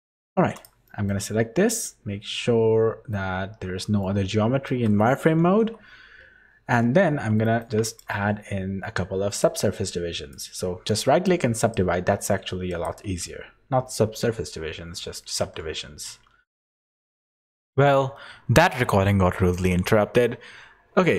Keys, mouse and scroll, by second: 0.3 3, 0.5 click, 0.8 middle click, 1.1 z, 1.8 middle click, 3.1 z, 4.0 middle click, 5.6 KP_1, 7.4 shift+middle click, 7.8 right click, 9.3 right click, 11.6 right click, 12.7 right click.